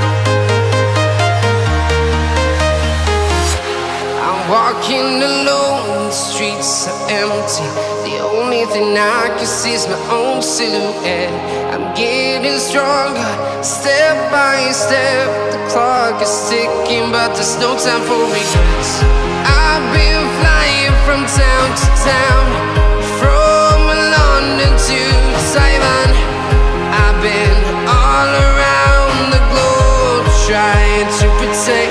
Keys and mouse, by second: 1.9-6.0 drag, 8.8-10.8 drag, 16.0 shift+click, 18.4 shift+d, 19.5 r, 20.3 z, 20.8 KP_9, 21.0 KP_0, 21.7 KP_Enter, 23.2 shift+r, 23.7 shift+r, 26.6-27.6 drag, 27.8-30.4 middle drag.